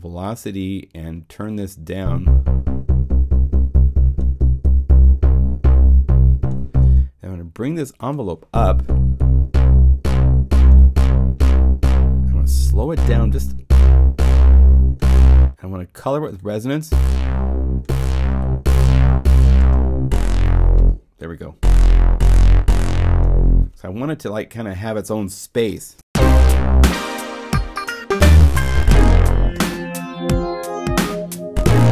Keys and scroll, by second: 25.7 0.